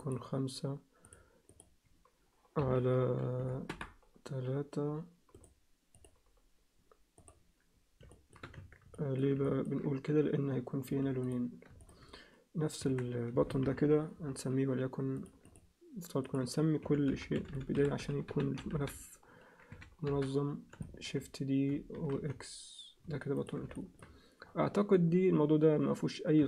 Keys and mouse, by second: 1.0-4.8 drag, 5.4 right click, 7.2 click, 8.1 alt+shift+middle click, 8.6 Tab, 8.9 alt+middle click, 9.5 ctrl+alt+middle click, 10.9 3, 11.2 click, 11.8 shift+click, 12.8 Tab, 13.6 ctrl+KP_1, 15.2 click, 16.3-20.3 drag, 17.5 t, 20.8 alt+shift+middle click, 22.0 shift+d, 23.8 alt+shift+middle click.